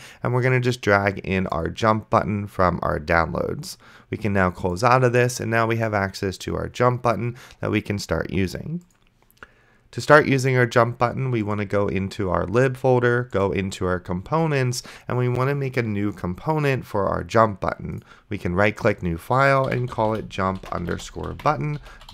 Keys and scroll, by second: 19.6-22.1 typing.